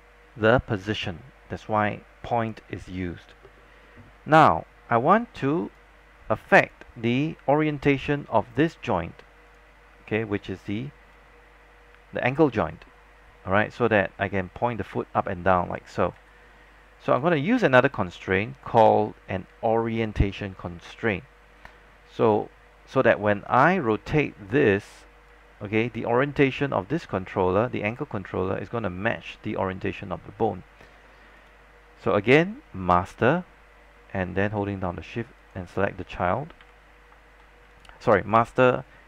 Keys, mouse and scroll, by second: 5.7 click, 7.4-7.9 scroll down 1, 9.0-16.3 drag, 16.3 z, 17.2 click, 25.4 z, 31.5 click, 35.5 shift+click, 36.7 shift+w, 37.8 click.